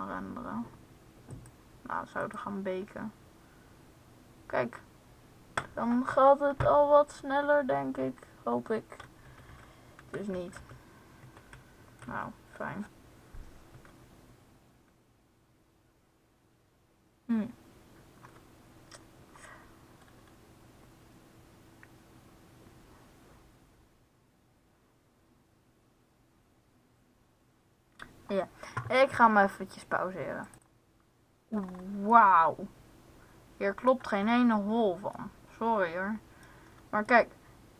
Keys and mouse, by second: 1.2-4.0 drag, 9.1 Left, 9.4 Left, 9.8 Right, 10.5 Left, 10.6 Left, 11.2 Right, 12.0 Left, 14.2 Right.